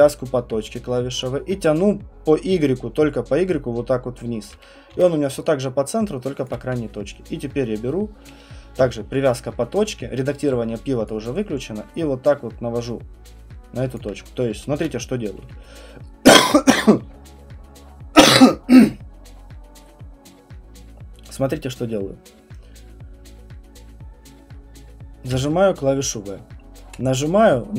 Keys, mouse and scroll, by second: 0.0-5.4 typing, 4.4 click, 6.5 alt+click, 8.8-10.3 typing, 13.9 click, 14.1 typing, 14.7 ctrl+z, 25.3-27.7 v.